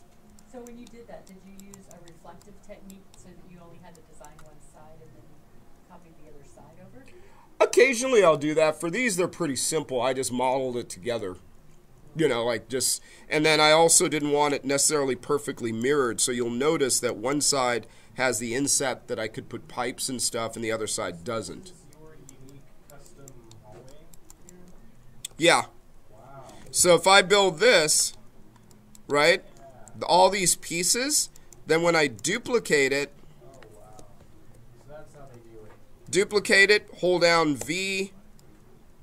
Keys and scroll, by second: 26.4 ctrl+d, 35.9 ctrl+d.